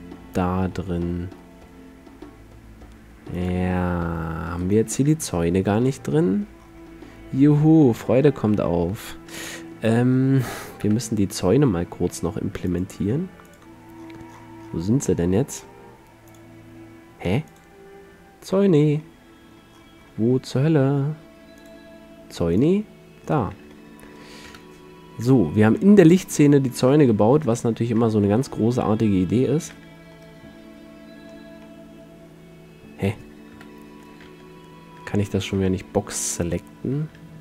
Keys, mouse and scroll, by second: 3.5-4.8 drag, 4.8 middle click, 5.4 click, 5.6 z, 5.8 KP_Decimal, 9.6 KP_7, 11.0 KP_5, 14.4-15.5 middle drag, 15.5 click, 15.6-16.4 middle drag, 16.4-16.8 drag, 21.7-23.4 drag, 23.4-24.6 middle drag, 24.6 KP_7, 27.2 z, 28.4 a, 29.8 b, 33.6 KP_7, 34.4 Tab, 35.2 Tab, 35.7 a, 36.4 middle drag.